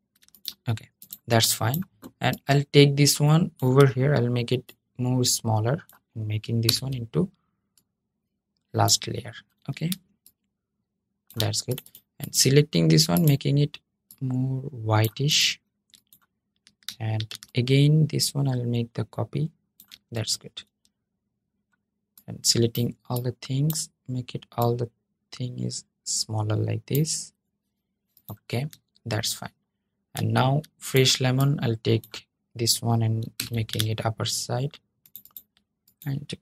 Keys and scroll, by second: 6.4 super+{, 33.1 super+}.